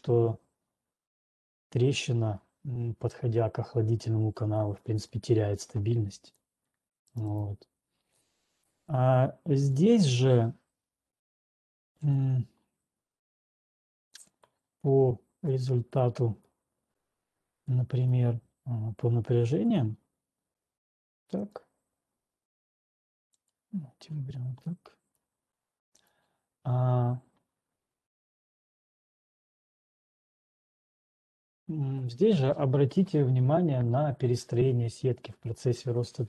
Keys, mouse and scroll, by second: 5.1 click, 6.6 click, 7.1 click, 8.0 right click, 12.2 scroll down 1, 14.6 click, 16.2 click, 17.2 click, 18.3 scroll, 19.7 middle click, 20.1 click, 21.6 click, 23.6 click, 25.6 middle click, 26.1 click, 27.3 middle click, 28.1 click, 28.7 middle click, 30.1 middle click, 31.9 scroll down 5, 33.8-35.1 middle drag.